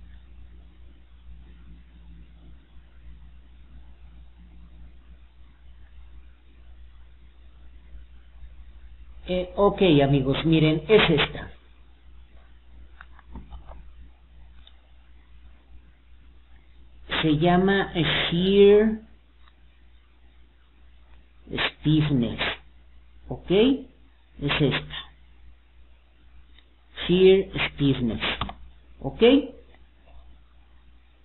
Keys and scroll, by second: 6.8 alt+d, 21.6 Escape.